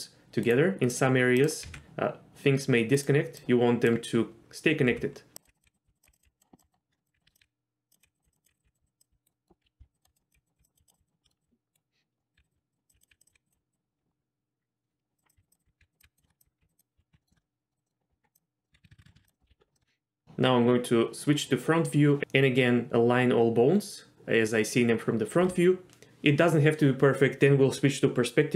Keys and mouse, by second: 1.6 g, 3.4 click, 4.9-13.5 typing, 6.0 click, 6.2 click, 6.9 shift+middle click, 8.2 click, 9.3 middle click, 10.5 click, 10.7 click, 11.2 shift+middle click, 12.3 click, 12.5 click, 13.0 click, 15.2 click, 15.3-17.1 typing, 16.0 click, 16.2 shift+middle click, 17.1 ctrl+z, 17.2 middle click, 17.6 middle click, 17.7 click, 17.8 middle click, 18.1 Tab, 18.7-19.1 ctrl+z, 19.3 middle click, 19.5 KP_1, 19.7 shift+middle click.